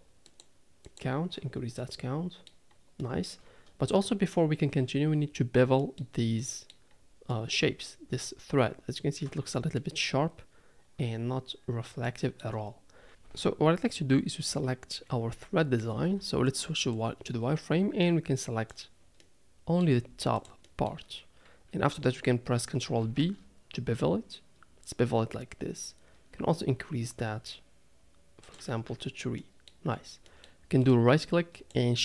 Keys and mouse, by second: 0.8 click, 2.4 middle click, 3.0 middle drag, 5.8 middle drag, 6.4-6.7 middle drag, 7.3-7.6 middle drag, 9.8 middle drag, 12.0-12.4 shift+middle drag, 14.5 KP_3, 16.0 z, 17.1-18.7 drag, 19.2 middle click, 19.8 middle click, 20.1 z, 20.8 middle click, 23.0 ctrl+b, 28.8 Tab, 29.4-29.7 middle drag, 30.3 middle click.